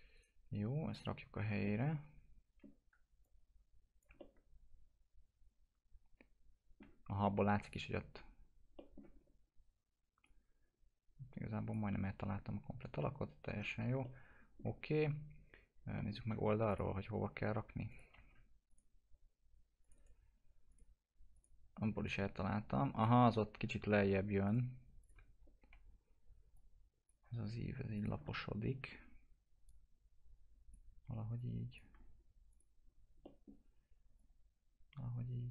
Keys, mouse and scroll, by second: 0.1 right click, 0.9 click, 1.3 scroll up 1, 1.6 alt+middle click, 2.8 w, 3.2 click, 4.1-7.6 alt+middle drag, 7.8 click, 8.7 middle click, 9.1-10.2 scroll up 1, 10.2 click, 14.0 alt+middle click, 14.8-15.9 scroll down 1, 15.9 middle click, 16.6 click, 18.1 alt+x, 18.6 click, 19.9 right click, 20.6 click, 23.5 ctrl+z, 24.4 click, 25.4 scroll up 1, 25.5 F4, 26.1-26.5 scroll up 1, 26.5 click, 28.2-29.6 alt+middle drag, 29.6-31.3 drag, 31.3 click, 32.5 click, 33.2 middle click, 34.1-35.5 drag.